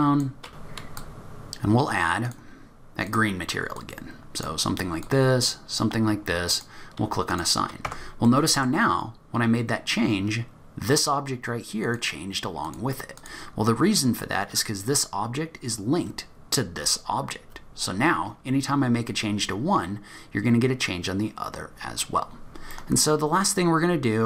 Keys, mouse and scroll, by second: 0.6 click, 0.8 shift+click, 1.4 click, 2.2 click, 3.1 click, 6.5 click, 7.3 click, 7.9 Tab, 8.3 middle click, 8.7-10.3 scroll down 1, 10.3 scroll down 2, 11.8 click, 12.6 click, 13.2 click, 17.8-20.4 scroll down 2, 20.4-21.1 scroll down 1, 22.2-22.7 scroll up 1, 22.7 middle click, 22.7-23.4 scroll up 1.